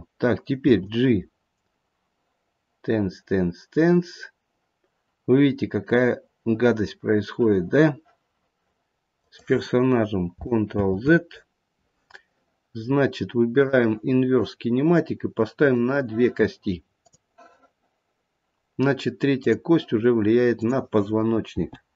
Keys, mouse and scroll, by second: 0.5 g, 10.8 ctrl+z, 13.5 click, 15.6 click, 16.9 click, 19.3 click, 20.5 click, 21.5 g.